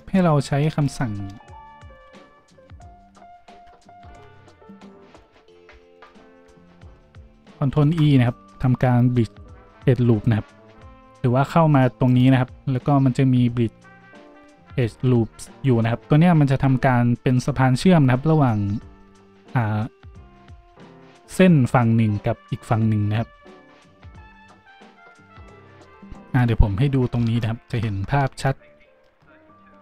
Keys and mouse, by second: 1.9 ctrl+w, 4.1 ctrl+z, 5.1 z, 5.9 alt+shift+middle click, 6.8 z, 7.7 ctrl+e.